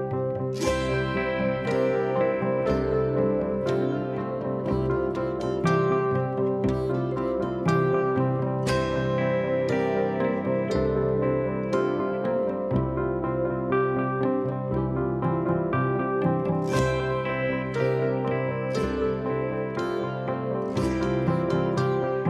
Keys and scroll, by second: 4.3 ], 15.7 Escape, 18.4 ctrl+z.